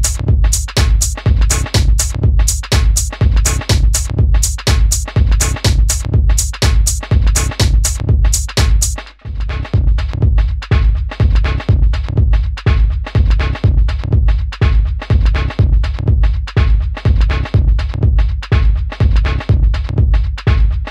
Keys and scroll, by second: 0.8 super+z, 3.3 d, 10.9 d.